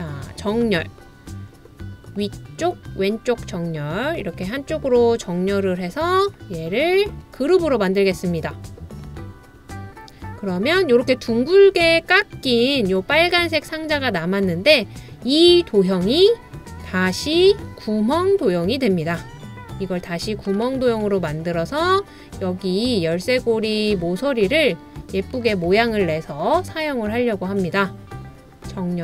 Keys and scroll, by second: 3.0 typing, 13.3 typing.